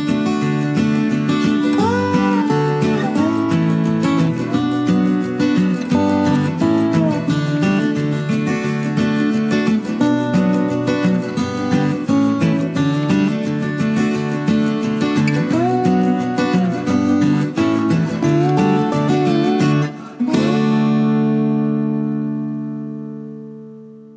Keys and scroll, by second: 1.8-3.0 typing.